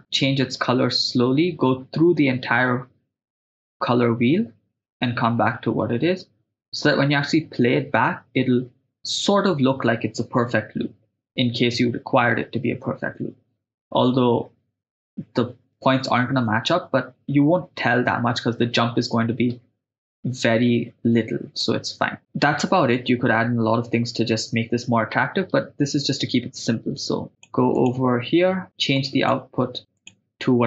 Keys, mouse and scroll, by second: 21.6 click, 22.3 shift+space, 27.3 click, 27.7 click, 29.0 click, 30.0 click.